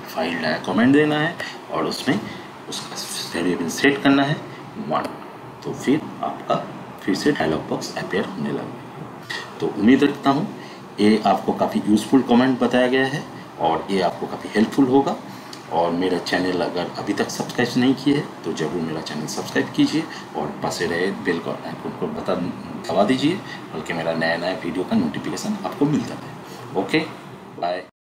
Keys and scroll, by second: 0.0-0.2 typing, 1.1 Return, 3.8 1, 4.8 Return.